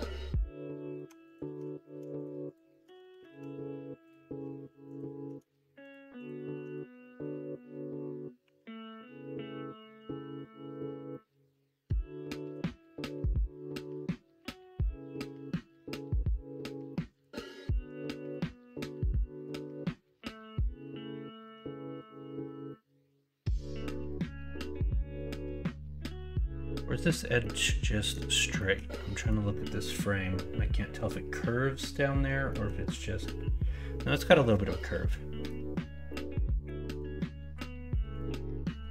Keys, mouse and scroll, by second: 2.2 click, 3.1 ctrl+z, 8.4 r, 19.2 shift+middle click, 27.5 middle click, 28.6 middle click, 34.7 middle click, 36.1 middle click, 38.1 click.